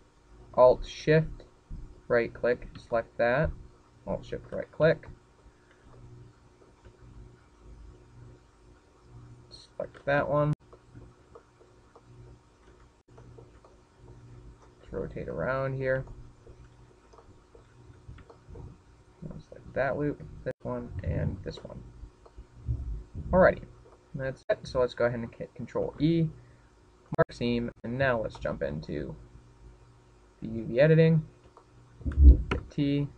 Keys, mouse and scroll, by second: 0.4 alt+shift+right click, 1.1 shift+middle click, 4.0 alt+shift+right click, 5.1 shift+middle click, 6.3 alt+shift+right click, 6.7-7.0 scroll down 5, 7.2 shift+middle click, 8.1 middle click, 11.6 alt+shift+right click, 12.2-12.7 scroll down 3, 13.0 shift+middle click, 13.6 shift+middle click, 14.4 shift+middle click, 15.0-15.4 scroll up 8, 15.4 shift+middle click, 15.9 middle click, 16.4-17.3 scroll down 14, 17.6 middle click, 18.3 shift+middle click, 19.0-19.4 scroll up 7, 19.4 shift+middle click, 20.1-20.8 scroll up 3, 20.6 shift+middle click, 21.7 alt+shift+right click, 22.3 alt+shift+right click, 23.5 alt+shift+right click, 23.9-24.5 scroll down 1, 24.5 middle click, 24.5 scroll down 6, 25.7-26.2 scroll down 3, 26.2 middle click, 28.1 ctrl+e, 30.7 click, 32.1 click.